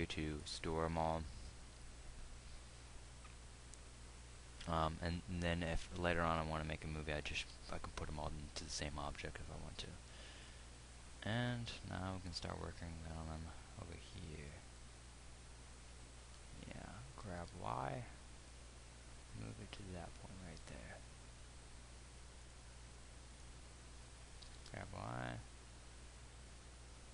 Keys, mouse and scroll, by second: 17.8 g, 25.0 g.